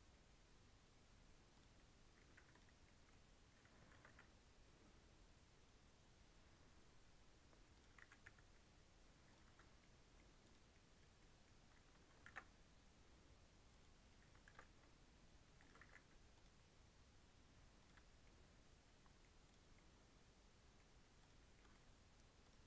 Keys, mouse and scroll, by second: 1.7 middle click, 2.3 3, 2.5 click, 2.7 scroll down 1, 2.8 middle click, 3.1-3.5 scroll up 2, 3.9 ctrl+b, 7.9 g, 9.4 Tab, 9.6 scroll down 2, 9.7 middle click, 10.4 click, 10.7-11.0 middle drag, 11.0-11.5 scroll up 3, 11.1 middle drag, 11.6 Tab, 12.2 ctrl+r, 14.4 ctrl+b, 15.8 alt+e, 17.9 Tab, 18.1 scroll down 2, 18.2-19.4 middle drag, 19.4 click, 19.6 scroll down 1, 19.7-20.7 middle drag, 20.7-21.1 scroll up 3, 21.1 click, 21.5 middle click, 21.7-22.4 scroll down 4, 22.4 click.